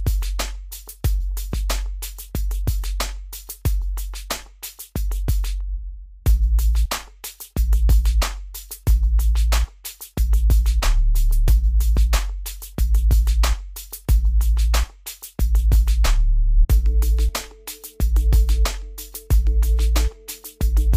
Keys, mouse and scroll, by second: 5.0 scroll, 6.9 click, 8.1 scroll up 1, 8.7 click, 9.3-10.0 scroll up 1, 11.0 click, 17.0 middle click, 17.7-18.5 scroll down 1.